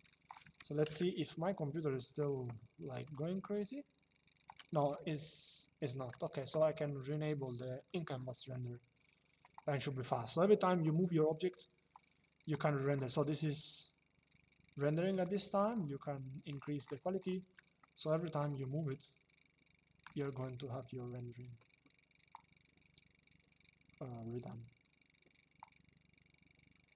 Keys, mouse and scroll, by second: 7.6 click, 14.9 click, 17.5 shift+middle click.